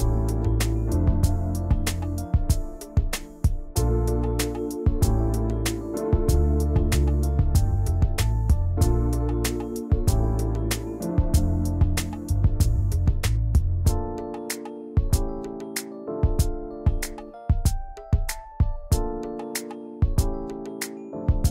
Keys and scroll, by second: 2.2 shift+m, 3.1 v, 9.4 ctrl+shift+], 17.5 Delete.